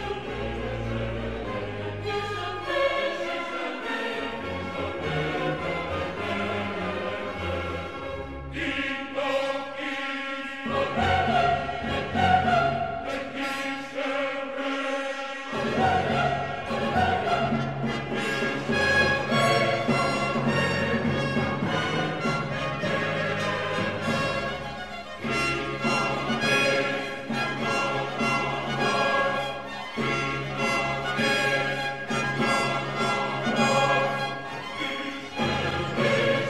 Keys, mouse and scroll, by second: 0.5-8.9 middle drag, 13.6-14.2 typing, 24.0 click, 24.7-33.1 middle drag.